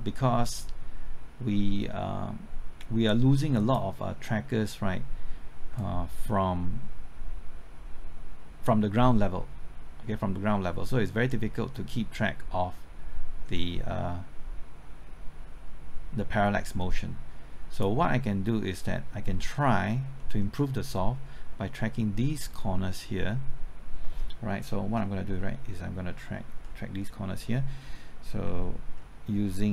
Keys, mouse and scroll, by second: 19.2 middle click, 19.7-20.2 scroll up 1, 20.2 middle click, 20.7-24.6 scroll up 1.